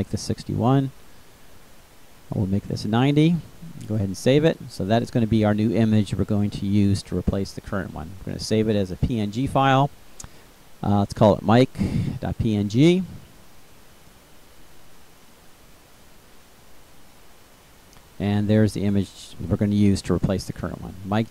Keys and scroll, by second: 1.8 9, 2.1 0, 10.4-11.4 typing.